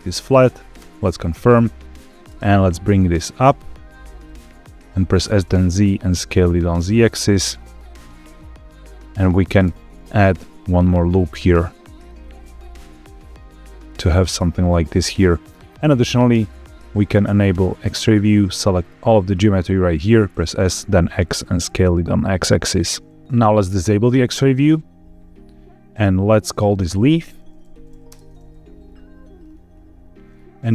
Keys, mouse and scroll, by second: 0.7 KP_Enter, 2.2 g, 4.1 click, 5.1 s, 5.3 z, 7.0 click, 7.4-8.6 middle drag, 9.6 ctrl+r, 11.8 click, 12.1-15.3 middle drag, 18.0 click, 18.6 click, 20.2 s, 20.5 x, 22.5 click, 22.8 middle click, 24.0 click, 26.4 click, 26.6-28.0 drag, 29.3-30.2 scroll down 4, 30.2-30.7 scroll down 1.